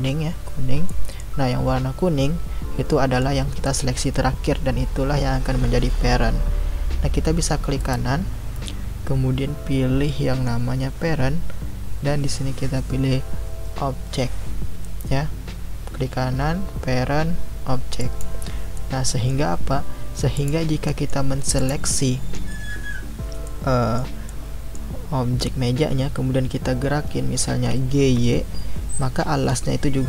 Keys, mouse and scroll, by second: 0.9-6.7 middle drag, 7.8-10.8 right drag, 18.7-19.6 middle drag, 19.6 scroll down 2, 20.3 click, 20.8-21.6 middle drag, 21.6 click, 23.4-27.3 middle drag, 27.5 g.